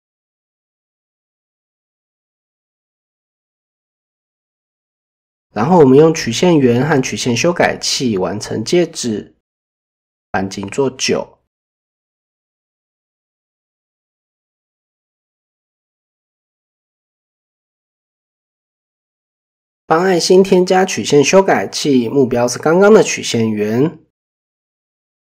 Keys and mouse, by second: 0.0 shift+middle drag, 3.0 shift+middle drag, 6.2 middle click, 7.2 click, 8.3 click, 10.4 shift+middle click, 12.6 click, 13.5-14.0 middle drag, 14.3 click, 15.1 middle click, 17.1 click, 21.2 click, 21.5 middle drag, 24.1-24.8 middle drag.